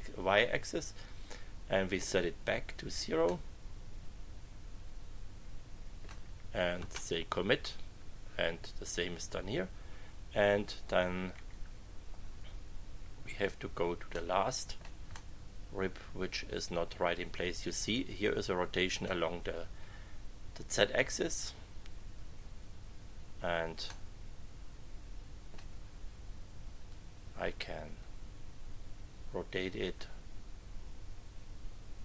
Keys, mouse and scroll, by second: 1.0 click, 3.2 click, 3.8 middle click, 4.4-6.2 drag, 6.7 Return, 11.3 Right, 12.3 Left, 13.0 Left, 14.1 middle click, 15.1 middle click, 15.9 click, 16.5 middle click, 17.1-19.2 drag, 23.8-25.7 middle drag, 26.9-32.0 drag.